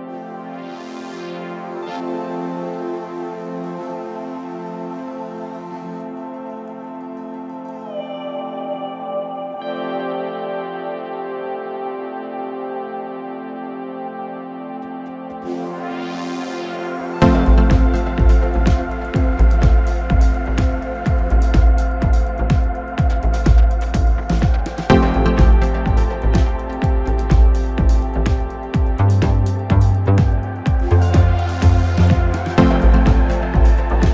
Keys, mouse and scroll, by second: 0.8 shift+click, 1.9 middle click, 2.7 shift+click, 3.2 shift+click, 3.6-4.7 middle drag, 4.7 KP_7, 5.7 s, 8.0-9.4 scroll up 1, 9.4 g, 14.0 scroll up 2, 14.3 scroll down 3, 14.5-15.6 middle drag, 15.6 KP_1, 15.9 Tab, 16.6 s, 18.3-19.5 middle drag, 19.5 ctrl+a, 20.7-22.1 middle drag, 22.1 click, 23.9-25.6 drag, 26.3-29.4 drag, 29.4 KP_1, 30.3-31.8 middle drag, 31.8-34.1 drag.